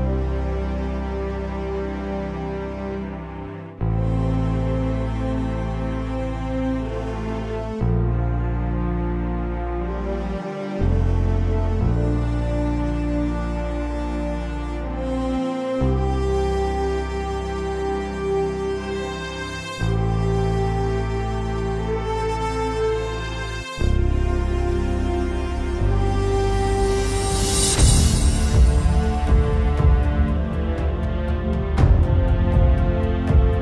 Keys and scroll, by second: 3.0 ctrl+z, 4.9 ctrl+z, 15.1 ctrl+z, 15.6 ctrl+z, 16.5 ctrl+z, 18.9 z.